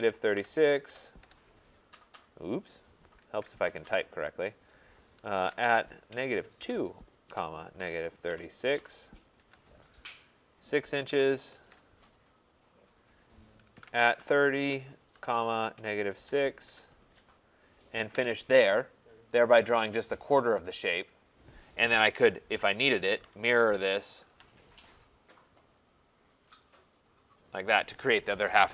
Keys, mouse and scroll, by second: 0.0-0.9 typing, 1.3 Return, 2.2-3.0 typing, 3.4 ctrl+z, 5.2-6.6 typing, 7.8-16.7 typing, 12.7 click, 18.1 Return, 19.6 click, 22.8-24.3 typing, 25.9 click, 27.5 click.